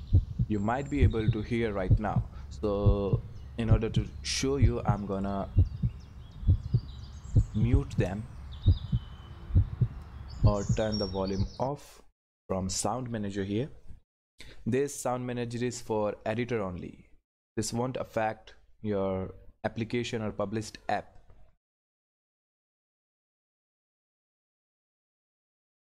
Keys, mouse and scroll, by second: 5.1 click, 8.5-13.8 drag, 24.0 click, 24.1 click.